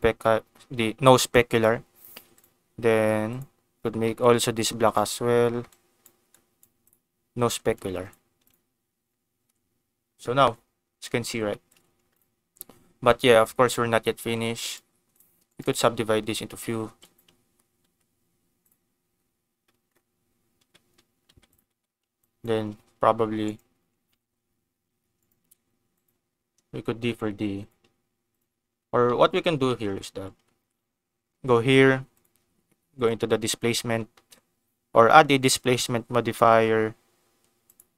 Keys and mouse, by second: 1.4 click, 2.3 click, 3.2 click, 4.0 middle click, 7.7 click, 9.3 ctrl+s, 11.4 shift+middle click, 12.1 click, 13.1 Tab, 14.1 a, 14.7 right click, 15.4 right click, 16.8 1, 17.8 Tab, 20.6 Tab, 21.2 Tab, 21.4 click, 21.7 Tab, 22.2 click, 22.9 g, 23.4 right click, 24.0 g, 25.1 click, 25.9 click, 26.5 g, 27.0 click, 27.5 click, 27.7 g, 28.3 click, 29.0 ctrl+z, 29.2 ctrl+z, 29.4 ctrl+z, 29.7 ctrl+z, 30.1 Tab, 30.6 ctrl+s, 32.1 click, 32.9-37.8 drag.